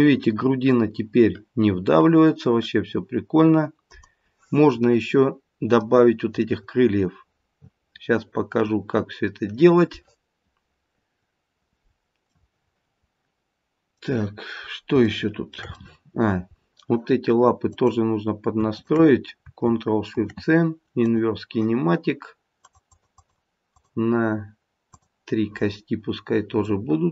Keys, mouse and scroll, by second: 4.4-6.4 scroll down 2, 4.8 middle click, 6.4 middle click, 7.5 middle click, 9.2-10.3 scroll down 2, 12.4 middle click, 15.1 shift+middle click, 15.7 middle click, 16.6-17.7 scroll up 2, 17.7 click, 18.7 shift+click, 22.5 click, 22.8 click, 23.0 click, 23.7 click, 26.7 middle click.